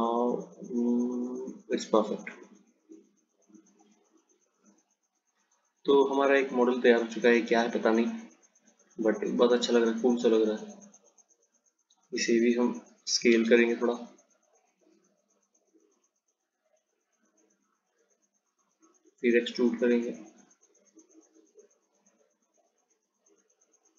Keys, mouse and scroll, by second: 2.3 click, 3.7 click, 10.7 click, 13.1 s, 20.5 click, 23.3 click.